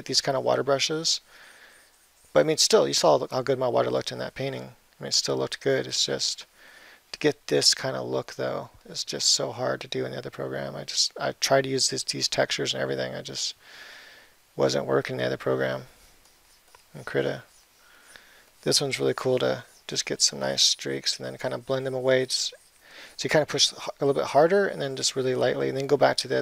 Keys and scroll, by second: 15.2 [.